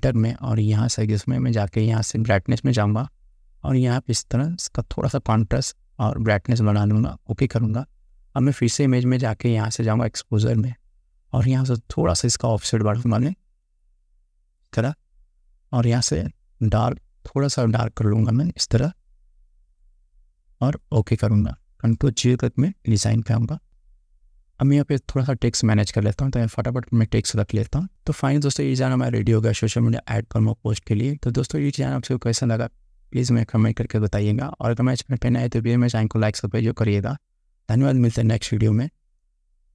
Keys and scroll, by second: 22.9 ctrl+0.